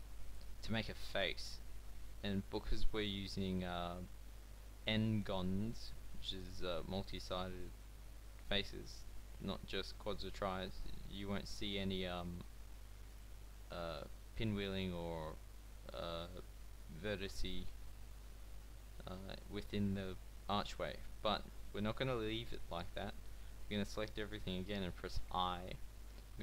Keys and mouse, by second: 11.1 a, 17.0 click, 21.2 a, 25.2 i.